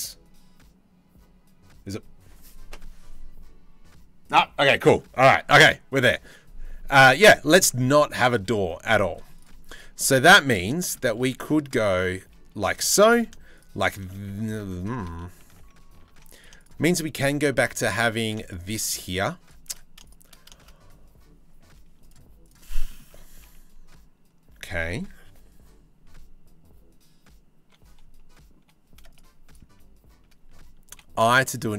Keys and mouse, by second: 8.6 shift+middle click, 9.0 middle click, 10.0 middle click, 10.4 shift+middle click, 11.0 ctrl+r, 12.5 3, 14.1 ctrl+r, 14.7 ctrl+z, 15.1 ctrl+z, 15.7 ctrl+z, 22.5 shift+middle click, 30.5 i.